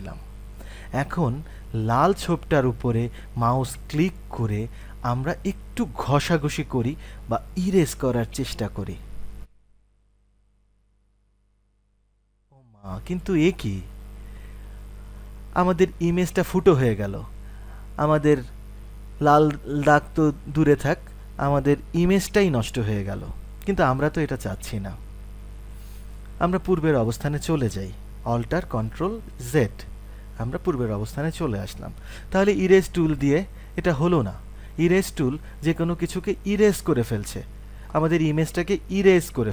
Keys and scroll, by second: 28.2 ctrl+v, 29.2 ctrl+alt+z, 33.6 typing.